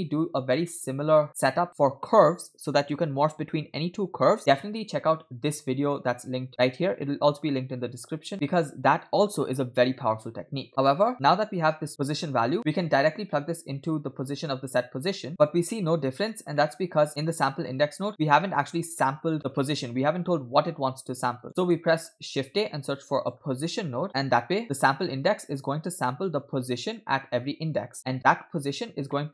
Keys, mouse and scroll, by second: 0.9 scroll down 2, 1.2 middle click, 10.7 middle click, 10.7 scroll down 2, 11.4-14.5 drag, 15.3 middle click, 16.6 middle click, 17.8 scroll up 2, 18.1-18.7 drag, 19.0 middle click, 19.4-21.8 drag, 22.0 middle click, 22.3 shift+a, 26.1-27.0 drag, 28.0 scroll down 2, 28.1 middle click, 28.8-29.1 scroll down 2, 29.2 middle click.